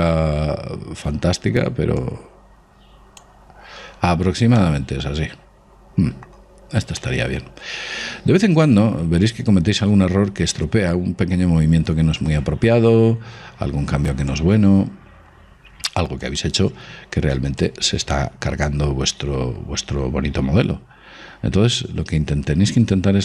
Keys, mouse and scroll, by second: 0.3 scroll up 1, 2.6 click, 3.1-4.3 middle drag, 4.6-7.0 middle drag, 7.7-9.4 middle drag, 13.9-16.0 middle drag, 14.9 click, 16.9-21.2 drag.